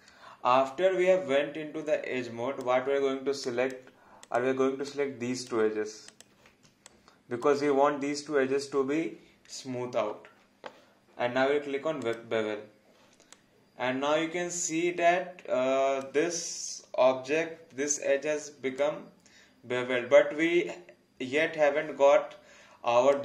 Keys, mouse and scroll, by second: 3.4 alt+click, 4.9 alt+click, 6.1 shift+click, 6.8 alt+click, 12.0 click, 13.3 alt+click, 18.8 alt+click.